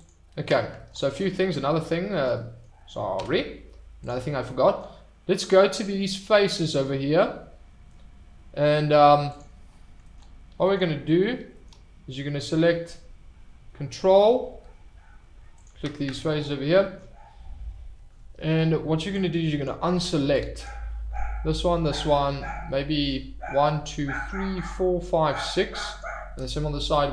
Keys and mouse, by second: 1.5-1.8 middle drag, 2.4 middle drag, 3.1 Tab, 15.6 alt+click.